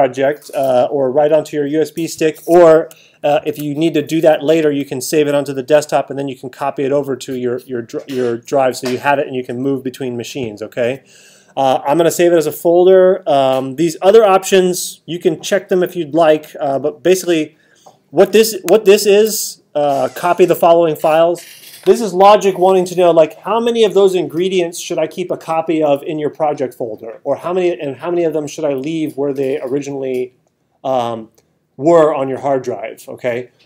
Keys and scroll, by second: 3.4 alt+super+8, 18.7 alt+super+8.